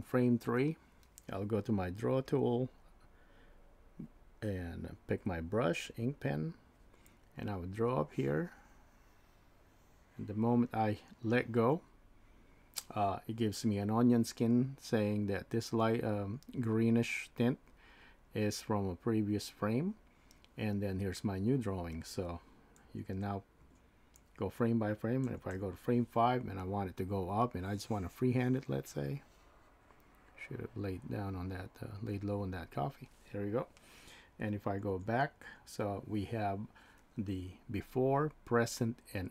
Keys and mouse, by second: 2.3 click, 5.2 click, 7.9-8.9 drag, 22.9 Left, 23.6 Right, 25.3 Right, 25.5 Right, 27.4-28.5 drag, 34.9 Left.